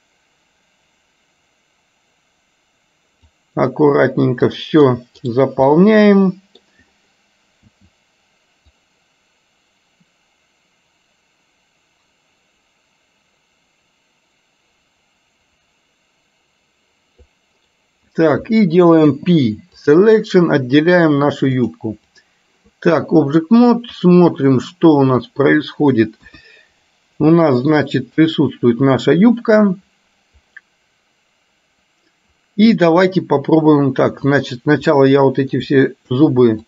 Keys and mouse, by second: 5.8 middle click, 21.7 click, 26.3 KP_1, 27.4 middle click, 34.4 click, 35.2 middle click.